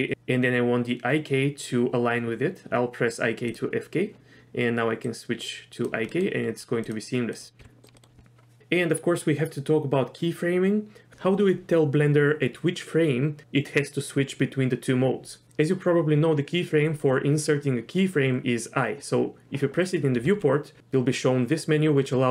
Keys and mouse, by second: 3.5 drag, 5.2 click, 6.0 middle click, 6.8 click, 7.6 g, 7.9 middle click, 20.2 i.